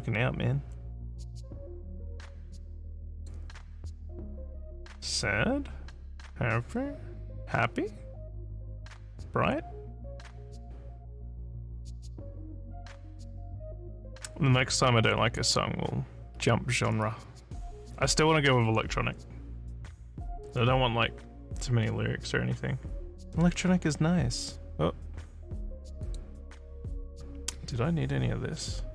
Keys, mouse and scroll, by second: 3.2 click, 15.4 click, 26.1 click.